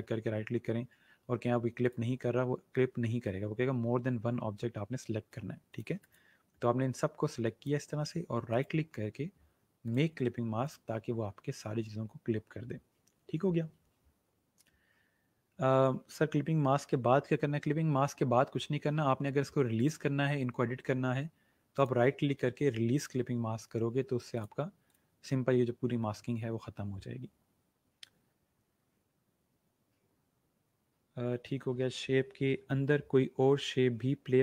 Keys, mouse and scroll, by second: 1.8 click, 5.6 click, 8.4 right click, 9.8 click, 19.8 click, 21.7 right click, 24.3 click.